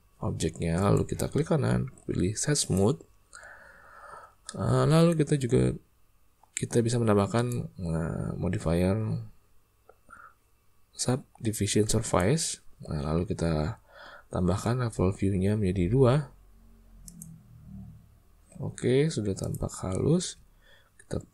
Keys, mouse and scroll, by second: 0.7 click, 4.4 middle click, 7.3-12.2 drag, 17.0 click, 19.5 drag, 20.1 space.